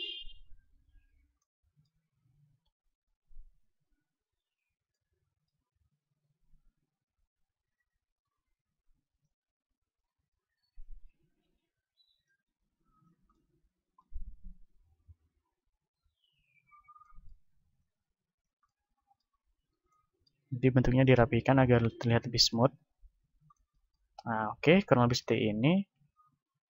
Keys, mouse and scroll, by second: 1.2-2.9 drag, 2.6 middle click, 2.6 KP_7, 3.6-5.1 drag, 4.9 right click, 5.1-6.2 middle drag, 6.2-8.5 drag, 6.2-9.1 right drag, 8.8 click, 10.4-11.4 drag, 11.7-13.3 right drag, 14.3 click, 14.3-24.8 right drag, 15.9 ctrl+z, 16.8-24.8 drag, 24.8 middle click, 25.8 KP_1.